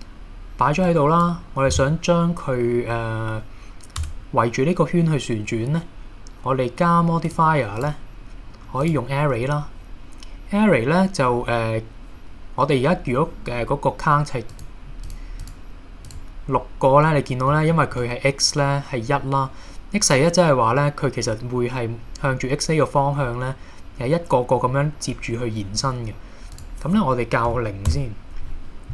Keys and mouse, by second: 0.9 click, 4.0 Tab, 7.3 click, 7.8-8.9 drag, 14.6 click, 15.1 click, 16.1 click, 17.8 shift+middle drag, 26.7-28.6 drag.